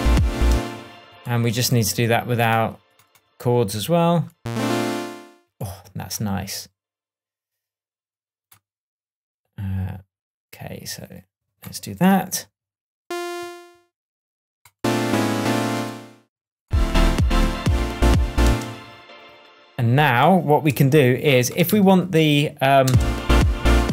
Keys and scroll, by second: 0.4 space, 0.6 space, 18.0 shift+Tab, 18.4 shift+space, 19.2 space, 20.7 super+c, 21.6 super+v, 22.8 super+space.